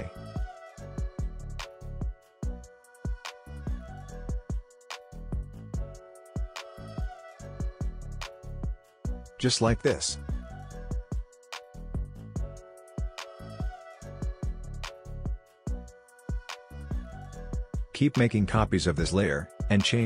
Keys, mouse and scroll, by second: 9.0-10.5 drag, 17.7 ctrl+d, 18.0-20.0 drag.